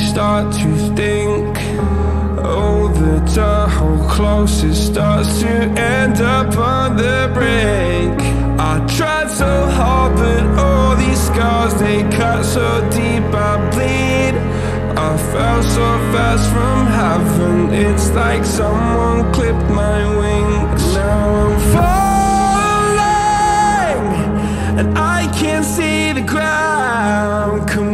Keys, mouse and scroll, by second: 0.2-0.9 drag, 1.6 click, 2.0 shift+click, 4.4 click, 5.9 click, 14.5 ctrl+a.